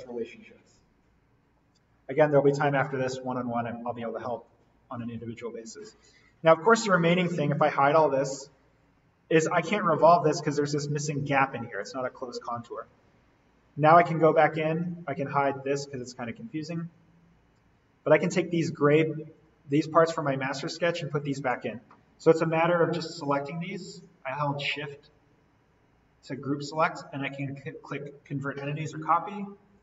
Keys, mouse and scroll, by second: 4.4 click, 5.8-6.3 scroll down 1, 7.1 scroll up 1, 7.2 alt+v, 7.8 click, 8.2-9.8 scroll up 1, 9.8-11.5 scroll down 1, 12.9 alt+v, 15.2 right click, 16.1 click, 27.2 click.